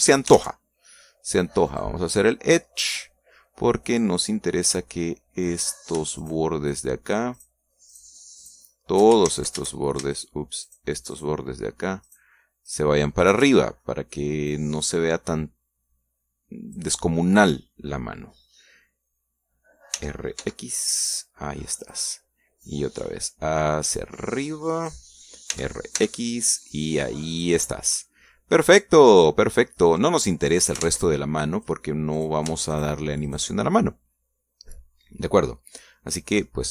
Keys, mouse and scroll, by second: 0.3 click, 1.2 ctrl+Tab, 2.6 click, 3.6-5.0 middle drag, 6.5 right click, 7.1 shift+right click, 7.6 shift+right click, 8.2 shift+right click, 8.8 shift+right click, 9.3 shift+right click, 10.2 ctrl+shift+z, 11.0 shift+right click, 11.5 shift+right click, 12.0 shift+right click, 13.0 shift+right click, 13.6 shift+right click, 14.1 shift+right click, 14.4 shift+click, 15.4-17.8 drag, 20.8 r, 21.3 x, 22.7 click, 23.6-26.0 drag, 26.4 r, 26.9 x, 28.2-30.6 drag, 28.5-30.0 right drag, 31.1 middle click, 31.7 ctrl+Tab, 32.5 click, 33.1 right click, 33.6 shift+right click, 34.2-36.7 shift+middle drag.